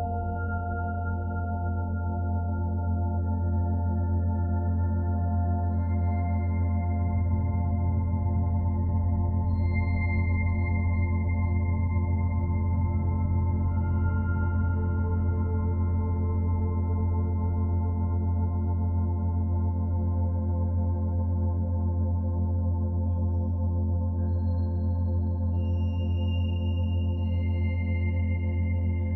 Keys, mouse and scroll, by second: 0.3-0.8 scroll up 5, 0.8 Tab, 1.0-1.6 scroll up 3, 1.1 middle click, 1.6 middle click, 2.1 ctrl+r, 4.3 ctrl+b, 5.8 g, 7.0 g, 8.4 2, 8.6 click, 9.1 alt+middle click, 9.8 e, 11.0 e, 11.6 r, 12.6-16.9 typing, 17.3 shift+middle click, 18.0 e, 18.8 r, 19.5 g, 21.1 click, 22.2 ctrl+z, 22.6 click, 22.8 r, 23.3 e, 25.1 g, 25.9 Tab, 26.0 scroll down 5, 26.2 middle click, 26.6 scroll down 2, 26.8 b, 27.3 o.